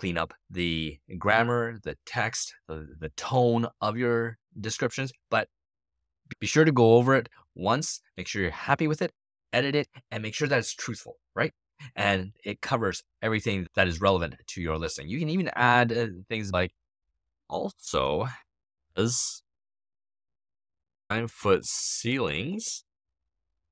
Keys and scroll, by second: 16.8-23.0 typing.